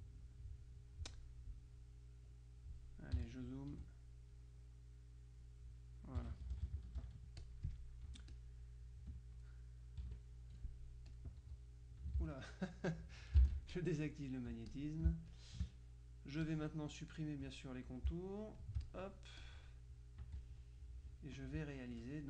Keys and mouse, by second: 1.9-3.4 drag, 3.3 z, 4.4-6.0 drag, 6.3 KP_Subtract, 7.5 click, 8.1 F1, 8.4 click, 10.1 KP_Subtract, 11.2 click, 12.3 ctrl+z, 13.8 shift+click, 14.7-16.1 drag, 15.1 space, 16.5-18.0 drag, 18.7 shift+click, 20.3 z, 20.5 click, 21.9 F2.